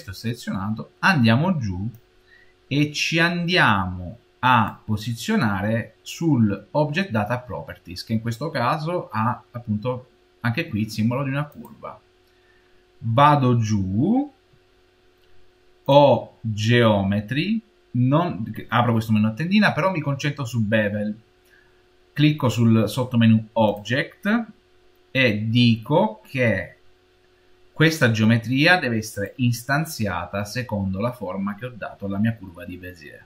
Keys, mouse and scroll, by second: 1.8-4.8 drag, 11.4-14.1 drag, 14.1-15.7 scroll down 3, 15.7 click, 17.4 scroll down 1, 19.2-20.9 scroll down 3, 20.9-22.6 scroll down 1, 23.6 click, 29.0 click.